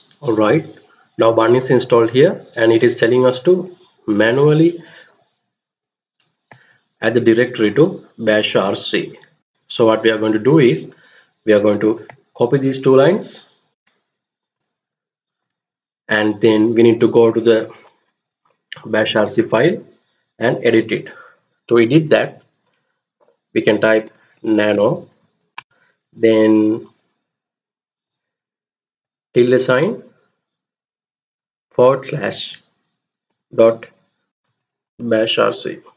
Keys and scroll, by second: 14.9 ctrl+c, 23.5-25.2 typing, 28.1-28.9 typing, 30.7-31.5 typing, 33.0-35.7 typing, 35.7 Return.